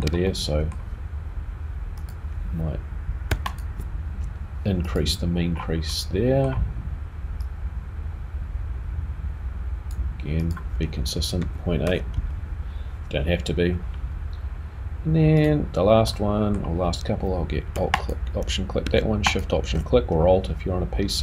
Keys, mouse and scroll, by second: 0.3 middle click, 2.0 click, 3.4 alt+click, 4.9 click, 5.4-5.8 scroll down 2, 5.9 middle click, 7.4 click, 16.1 middle click, 18.8 alt+click, 19.3 alt+shift+click.